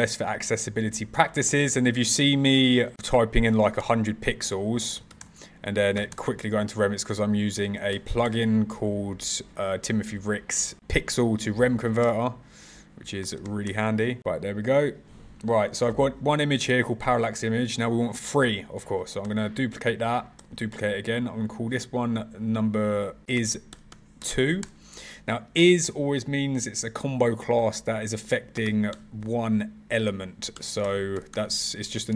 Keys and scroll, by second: 18.9 super+c, 19.1 super+v, 20.1 super+c, 20.3 super+v.